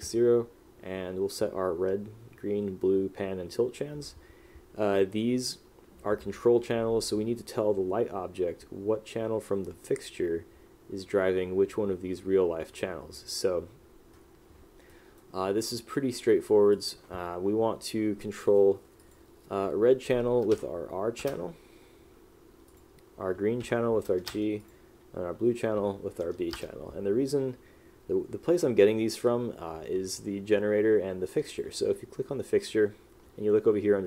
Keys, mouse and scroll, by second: 15.0 right click, 15.9 click, 16.9 click, 21.3 Return, 24.4 Return, 26.7 Return.